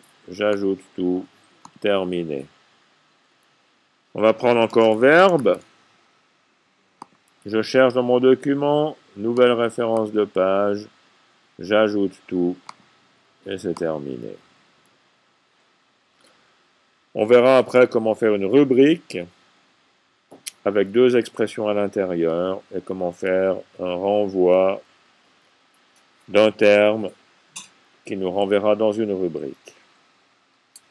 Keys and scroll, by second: 4.7-6.2 typing.